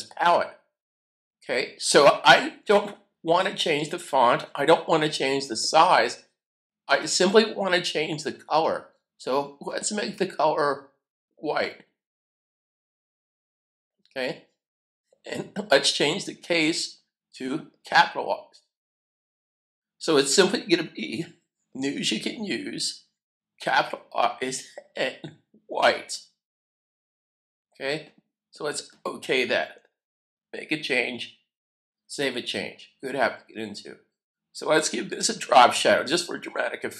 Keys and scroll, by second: 31.5 super+s.